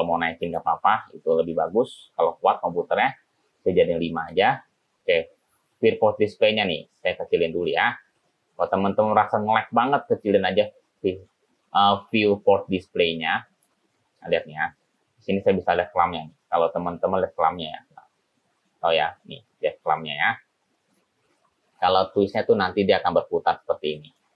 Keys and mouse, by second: 0.5 click, 4.4 click, 6.5 click, 7.3 click, 8.3 click, 14.1 middle click, 17.7 click, 19.2 click, 19.5 click, 20.2 click, 21.8 ctrl+z, 22.5-23.5 drag, 23.9 click, 24.2 click.